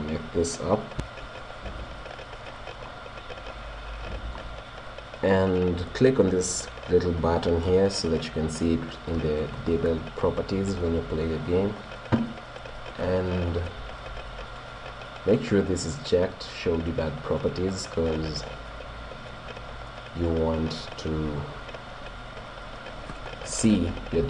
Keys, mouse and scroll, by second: 2.5-5.4 middle drag, 9.5-11.1 drag, 12.9-14.7 drag, 24.2 p.